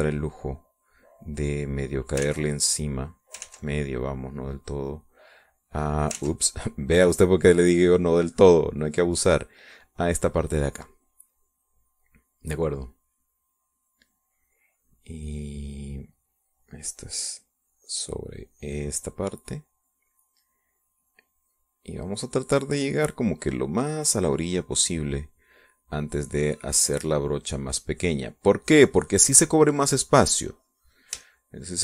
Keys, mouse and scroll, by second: 1.1 middle click, 2.1-3.2 drag, 3.2 ctrl+z, 3.5 ctrl+click, 4.4 ctrl+z, 4.7-6.1 ctrl+drag, 6.3 click, 7.1 ctrl+z, 7.5-11.0 ctrl+drag, 11.0 middle click, 13.9 middle click, 14.6-16.1 middle drag, 16.2 middle click, 16.7 middle click, 17.4-20.7 drag, 21.5-25.3 drag, 25.5 middle click, 27.0-30.4 drag, 30.5 middle click, 31.2-31.8 drag.